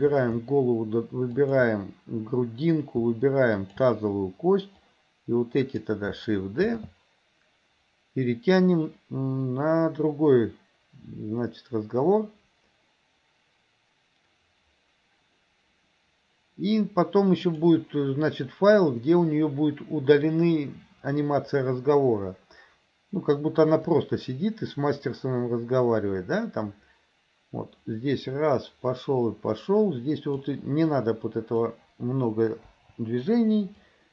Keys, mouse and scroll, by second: 0.0 shift+click, 1.4 shift+click, 3.5 shift+click, 4.8-5.9 drag, 6.8 shift+d, 24.0-30.5 drag, 30.9-31.7 drag, 32.8 Delete, 33.9-34.1 drag.